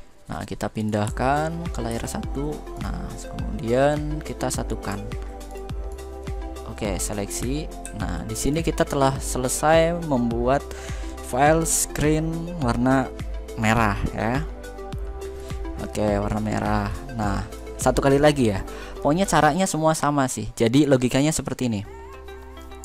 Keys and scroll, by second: 1.6 ctrl+v.